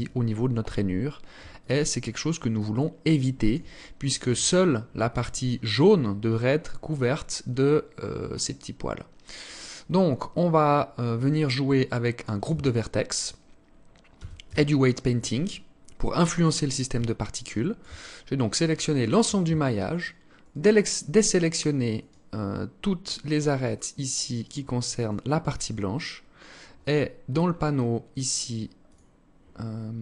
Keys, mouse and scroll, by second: 1.2 alt+click, 2.1 alt+click, 5.0 scroll down 2, 5.8 scroll up 1, 7.0 scroll up 1, 7.2 scroll down 1, 7.7 scroll down 1, 8.6 scroll down 1, 9.9-10.2 scroll down 3, 11.3 alt+click, 12.0 Tab, 13.2-13.5 scroll up 2, 13.6 a, 14.0 a, 16.7 alt+shift+click, 17.6 scroll up 1, 18.5 scroll up 2, 19.4 alt+shift+right click, 24.6 alt+shift+right click, 25.0-25.4 scroll down 6, 25.8 scroll up 2, 26.8 scroll up 1, 26.8-27.2 scroll down 2, 28.3 click.